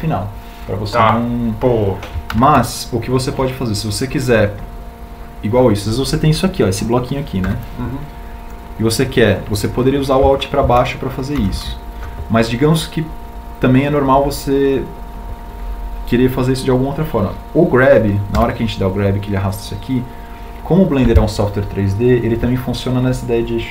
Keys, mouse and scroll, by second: 5.2 ctrl+z, 10.3 b, 13.3 alt+Down, 22.0 g.